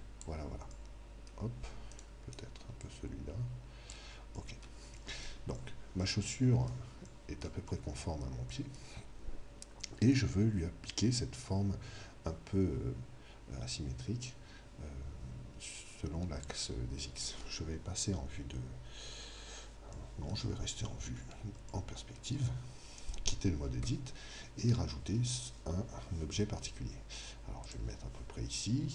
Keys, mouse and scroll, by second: 0.8-2.8 middle drag, 1.9 right click, 2.8 click, 4.3-5.9 middle drag, 5.9 click, 19.9-23.8 drag, 23.8 Tab, 27.5 Tab, 27.6 click.